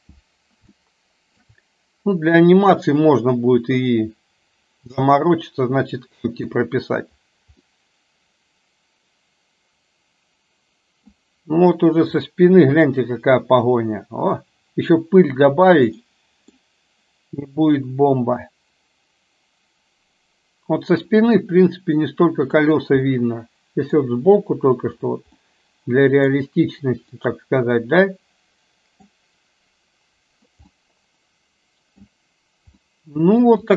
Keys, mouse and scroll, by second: 0.8-1.6 shift+middle drag, 5.2-6.5 middle drag, 7.7-11.2 middle drag, 12.3 middle click, 16.1 middle click, 21.4-22.7 middle drag, 23.2-24.1 middle drag, 25.6-26.3 middle drag, 27.2-29.2 middle drag, 30.8-32.2 middle drag, 32.8-33.6 shift+middle drag.